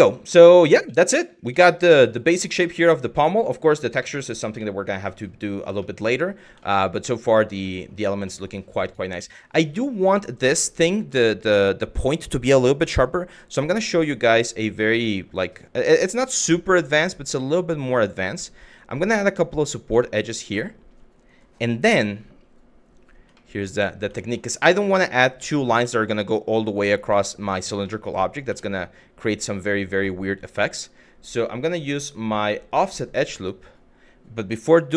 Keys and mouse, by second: 0.0 shift+middle drag, 0.5 middle drag, 1.3 shift+middle drag, 1.6 shift+middle click, 2.0 shift+middle drag, 2.3 shift+middle drag, 4.3 shift+middle drag, 5.6 shift+middle click, 6.3 shift+middle drag, 7.3 middle click, 8.0 shift+middle click, 8.5 click, 8.8 Tab, 14.0 middle click, 15.0 click, 17.0 shift+middle click, 18.5 click, 19.7 shift+middle click, 20.2 shift+middle click, 21.5 KP_Divide, 23.0 middle click, 23.8 middle click, 26.8 shift+middle click, 27.6 middle click, 28.2 shift+middle click, 31.6-32.4 drag.